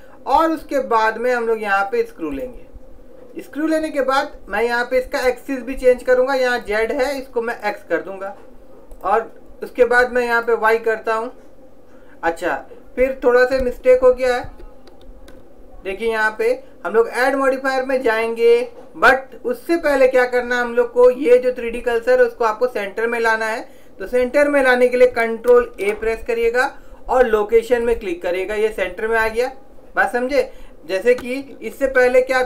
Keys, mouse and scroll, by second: 6.7-8.3 drag, 14.0 ctrl+z, 14.6 ctrl+z, 15.1 ctrl+z, 18.0 click, 26.0 ctrl+a, 31.9 ctrl+z.